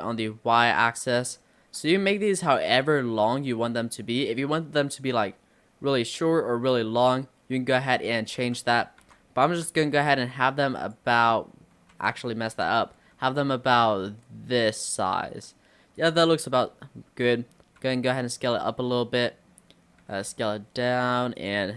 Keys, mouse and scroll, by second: 8.4 ctrl+z, 9.1 s, 11.3 middle click, 12.0 ctrl+z, 12.6 s, 16.7-17.9 middle drag, 17.9 s, 18.8-20.1 middle drag, 20.1 s.